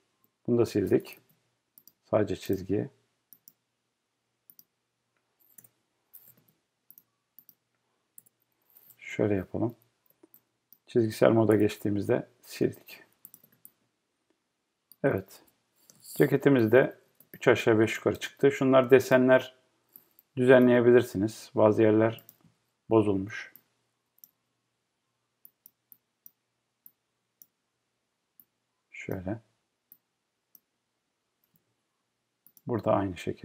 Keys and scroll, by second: 0.2 BackSpace, 1.1 BackSpace, 5.6 BackSpace, 6.3 BackSpace, 8.2 BackSpace, 8.9 BackSpace, 11.5 BackSpace.